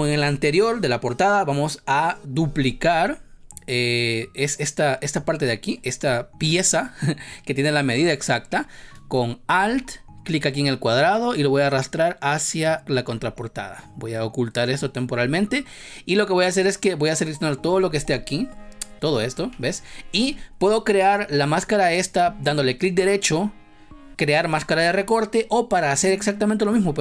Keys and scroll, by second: 19.5 ctrl+z.